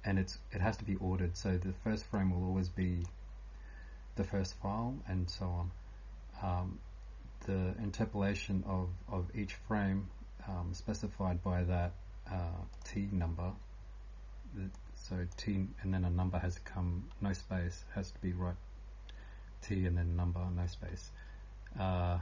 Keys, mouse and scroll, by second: 0.0-22.2 typing, 10.6 scroll up 1, 12.7 click, 14.7 click.